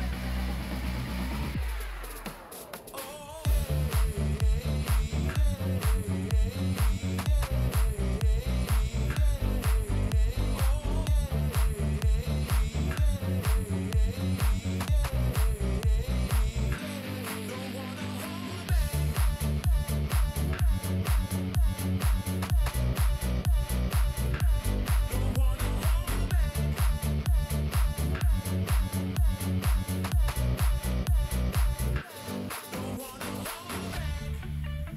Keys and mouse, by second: 1.1 click, 1.8 g, 3.7 ctrl+r, 5.1 click, 5.9 g, 9.7 g, 13.2 click, 14.1 g, 17.6 alt+click, 19.8 shift+middle click, 26.4 click, 32.0 click, 33.0 g.